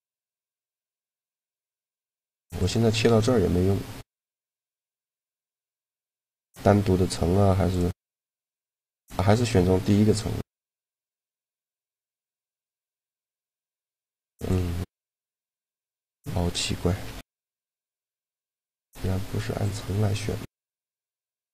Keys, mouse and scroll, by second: 2.3 click, 4.1 right click, 7.0 click, 9.6-11.5 middle drag, 11.5 click, 14.1-17.0 drag, 15.8 a, 16.7 m, 19.4 click, 19.9-21.0 drag, 20.1 a.